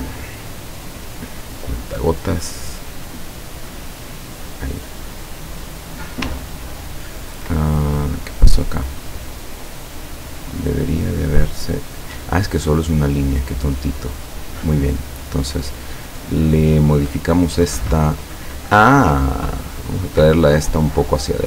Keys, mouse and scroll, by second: 1.8 click, 2.7 click, 4.2 click, 5.6 click, 6.5-7.2 ctrl+scroll up 4, 7.8 ctrl+click, 10.9 click, 11.7 click, 15.3 click, 15.7 click, 19.0 click, 20.9 click.